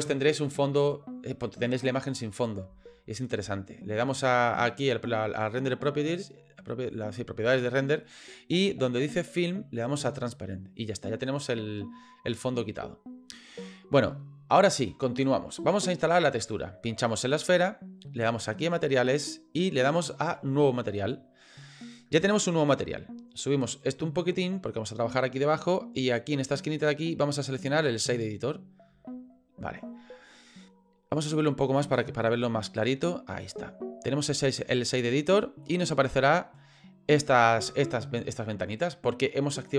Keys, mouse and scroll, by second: 5.6 click, 9.3 click, 10.3 click, 17.1 click, 19.1 click, 20.9 click, 23.8-25.2 drag, 26.6-29.5 drag, 30.3 click, 31.7-32.9 drag, 34.5 click.